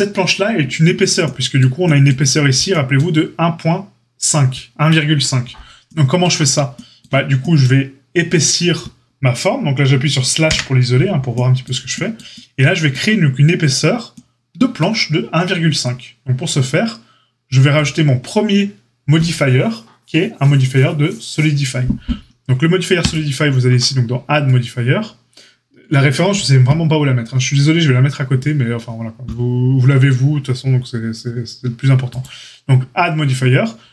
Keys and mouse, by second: 10.4 KP_Divide, 17.7 click, 17.8-23.1 middle drag, 23.1-33.9 drag.